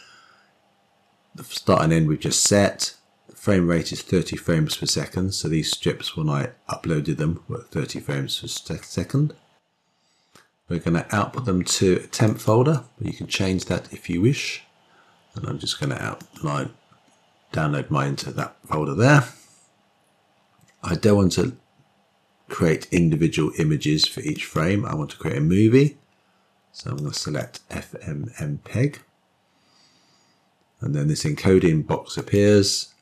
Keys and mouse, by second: 12.2-18.3 drag, 24.4-27.4 drag, 32.0-33.0 drag.